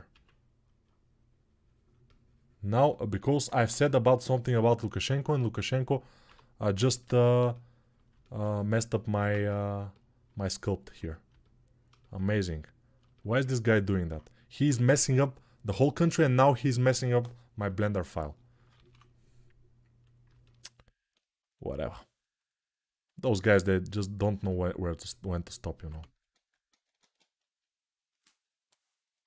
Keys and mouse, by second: 3.1-9.7 alt+right drag, 6.0 1, 9.1 ctrl+Tab, 9.7-21.3 middle drag, 18.5 shift+d, 21.3-24.3 drag, 24.3-29.2 middle drag, 25.7 ctrl+z, 26.1 ctrl+z.